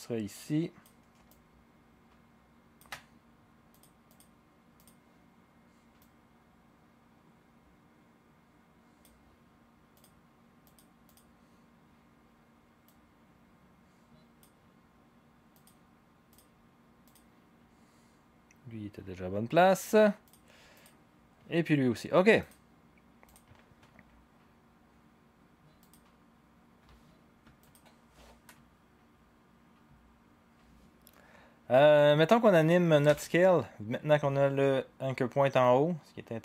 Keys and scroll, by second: 33.1 s.